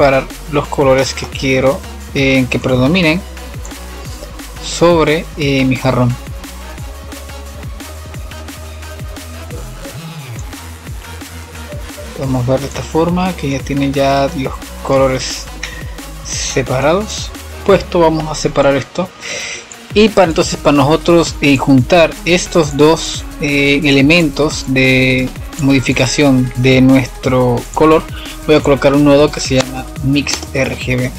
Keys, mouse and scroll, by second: 0.7 scroll up 1, 0.9-2.5 middle drag, 2.5-6.3 drag, 8.3-15.5 drag, 15.5-16.9 middle drag, 16.9 click, 18.5 click, 20.1-20.4 scroll up 2, 20.4-21.1 middle drag, 21.1-21.5 scroll down 5, 22.1-23.9 middle drag, 23.9 click, 24.8 click, 25.8 click, 27.4 drag, 28.7 shift+click, 29.3-31.1 drag.